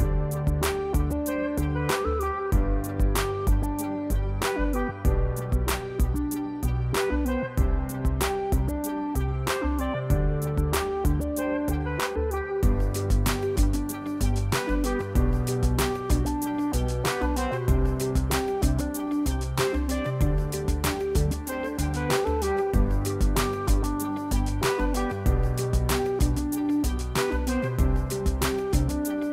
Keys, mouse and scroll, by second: 0.2 click, 0.7 F1, 1.9 click, 2.5 click, 4.8 click, 6.1 ctrl+shift+c, 7.0 F2, 9.5 click, 10.6 click, 11.7 click, 13.2 click, 14.7 click, 16.6 click, 18.4 click, 19.4 click, 19.5 click, 20.1 click, 20.7 click, 20.7 click, 21.7 click, 23.1 click, 23.6 click, 25.0 click, 26.2 click, 27.7 click, 28.4 F1, 28.7 click.